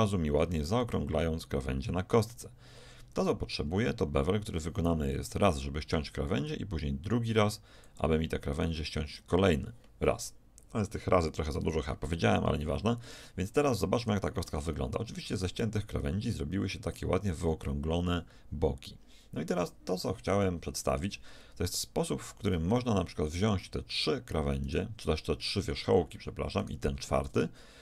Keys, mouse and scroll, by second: 15.5 middle click, 21.2 middle click, 23.3-24.8 drag, 26.5 middle click.